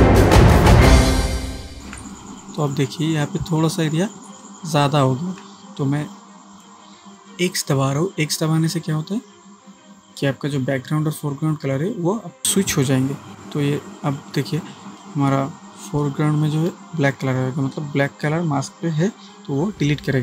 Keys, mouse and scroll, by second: 0.8-2.5 typing, 0.9 click, 1.3 click, 1.6-1.9 ctrl+click, 2.1-2.7 click, 4.3 ctrl+space, 4.4-5.7 ctrl+click, 4.8 ctrl+space, 13.3 x, 15.0-16.9 alt+right drag.